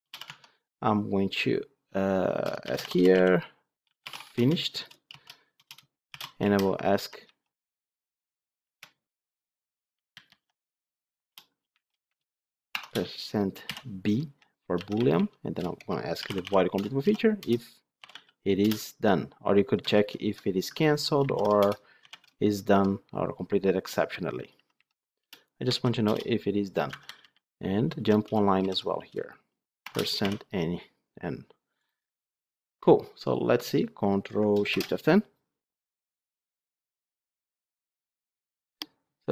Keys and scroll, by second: 0.2 Tab, 16.7 Return, 19.9 ctrl+shift+Left, 25.2 Return, 34.6 ctrl+shift+F10.